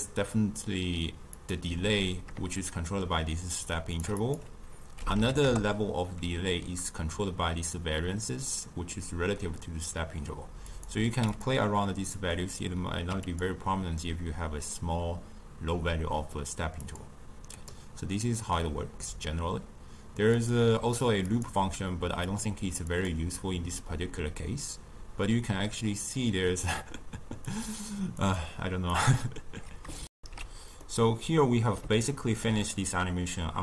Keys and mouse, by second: 10.7 click, 12.1-13.3 drag, 16.8-21.4 drag, 22.2-25.9 drag, 27.5-29.0 drag, 30.0 shift+q, 30.7-33.6 middle drag.